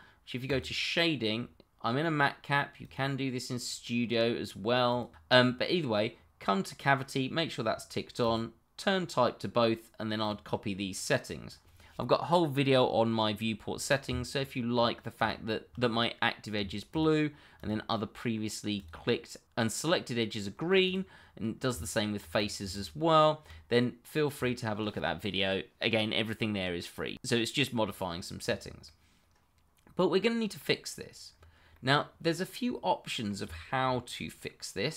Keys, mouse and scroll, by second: 0.4 click, 2.8 click, 8.2 click, 14.0 Tab, 15.1 click, 16.9 shift+click, 16.9 click, 17.5 shift+click, 18.7 click, 20.8 click, 21.7 Tab, 22.3 click, 22.7 shift+click, 26.2 click, 28.4-28.8 scroll down 1, 28.8 middle click, 31.3-31.7 scroll down 1, 31.7 middle click, 33.8-34.3 scroll up 1, 34.3 middle click.